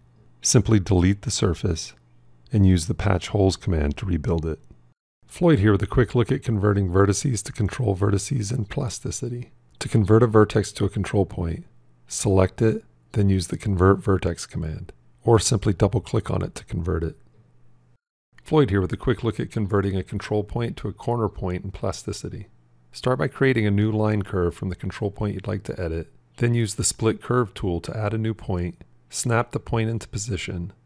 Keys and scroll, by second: 2.0 shift+Delete, 12.4 f.